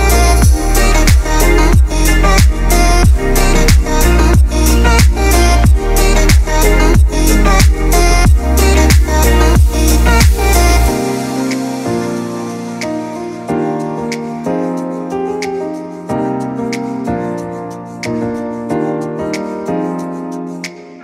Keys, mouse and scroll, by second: 1.5-3.0 drag, 3.4 click, 5.1-9.6 drag, 9.6 click, 11.3-15.0 drag, 15.0-19.8 drag, 19.8 click.